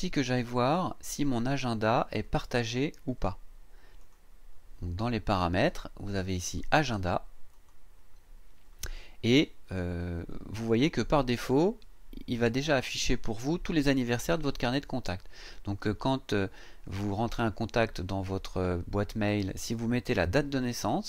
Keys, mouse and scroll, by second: 2.2 click, 4.0 click, 7.5 click.